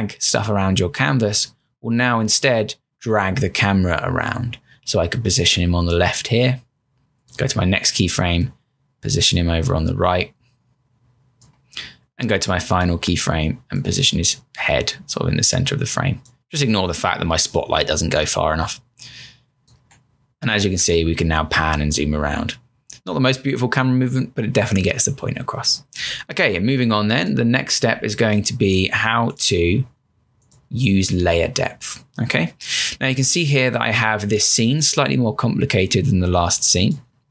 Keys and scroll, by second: 19.8 Return, 27.8 m.